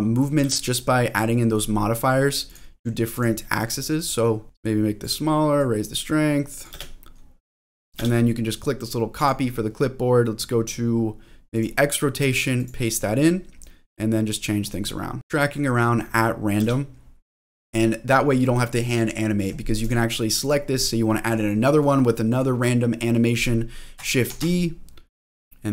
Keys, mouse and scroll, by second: 0.7 space, 2.4 click, 3.1 click, 4.1 click, 4.5 space, 5.6-6.6 drag, 6.7 space, 8.0 space, 9.1 click, 11.8 click, 12.6 click, 13.8 click, 15.2 space, 16.6 space, 19.8 click, 20.4 click, 24.2 shift+d, 25.2 middle click, 25.2 click.